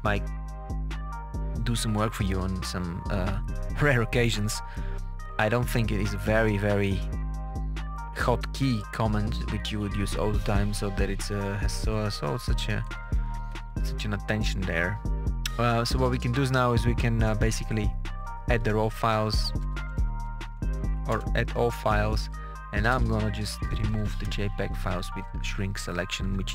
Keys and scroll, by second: 10.8 Page_Down, 11.5 Page_Down, 12.1 Page_Up, 12.8 Page_Down, 18.1 KP_Add, 19.0 Right, 19.5 BackSpace, 21.2 Return, 22.8 KP_Subtract, 23.8 Right, 24.2 BackSpace, 25.9-26.5 typing.